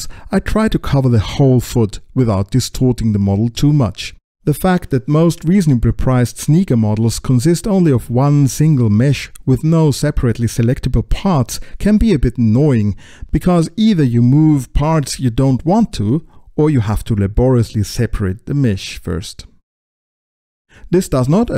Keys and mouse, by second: 0.2 click, 0.5 middle click, 0.8 middle click, 1.1 alt+z, 1.4 middle click, 1.8 Tab, 1.9 space, 1.9 middle click, 2.1 click, 2.5 click, 2.5 space, 2.8 alt+z, 2.9 click, 2.9 click, 3.1 click, 3.3 click, 3.4 alt+z, 3.5 click, 3.8 Tab, 4.0 click, 4.6 click, 5.6 click, 6.0 click, 6.1 click, 6.3 click, 6.8 Tab, 6.8 click, 7.3 ctrl+alt+x, 7.4 click, 7.9 click, 8.1 click, 8.4 click, 8.7 click, 9.6 right click, 9.8 shift+click, 10.3 right click, 10.3 BackSpace, 10.8 right click, 11.1 right click, 11.3 right click, 11.4 click, 11.6 right click, 11.7 click, 11.9 click, 13.1 click, 13.2 shift+click, 13.5 Tab, 14.4 click, 14.6 click, 14.9 Tab, 14.9 click, 15.4 Tab, 15.9 ctrl+l, 17.1 click, 17.1 click, 17.6 click, 18.0 click, 18.1 click, 20.1 alt+shift+o.